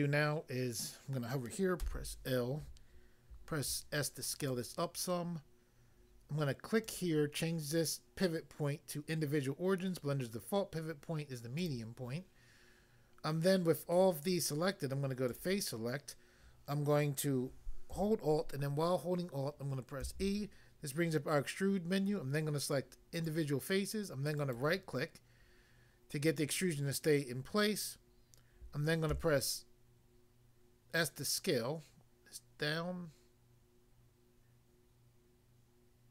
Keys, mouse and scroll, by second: 1.8 l, 3.5 s, 4.4 click, 6.9 click, 11.6 click, 11.7 click, 15.3 click, 20.0 alt+e, 23.2 click, 24.3 right click, 29.1 s.